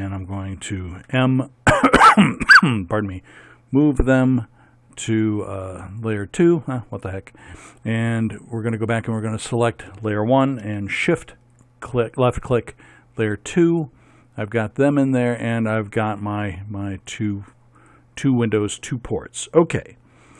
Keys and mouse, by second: 1.0 m, 12.0-13.6 middle drag, 17.0-20.3 right drag.